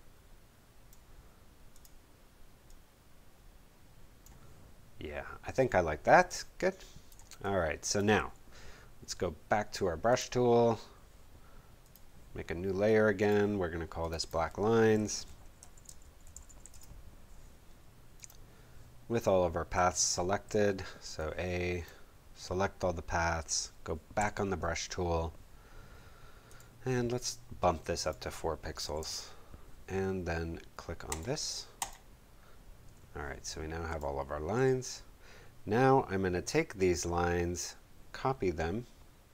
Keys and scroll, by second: 6.2 space, 14.7-17.1 typing, 19.7 a, 24.2 b, 28.8 4, 29.0 Home, 34.5 v.